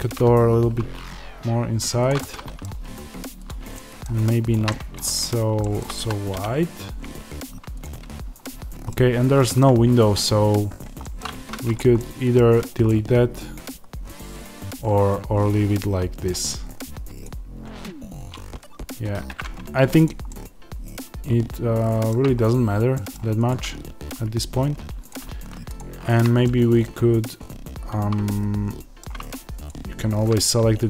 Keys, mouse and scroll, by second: 2.0 click, 2.1-3.4 middle drag, 3.4 click, 3.6 middle click, 4.4 shift+click, 4.6-7.7 middle drag, 5.1 scroll down 1, 5.9 s, 7.7 click, 8.3 scroll, 8.8-9.8 middle drag, 9.8-10.1 scroll, 10.9 middle click, 11.2 Tab, 11.6 click, 11.9-17.1 middle drag, 12.3-12.8 scroll down 2, 19.3-23.4 middle drag, 22.2-22.9 scroll up 2, 23.4 click, 24.0 Tab, 25.0 click, 26.3-29.6 middle drag, 29.6 shift+click.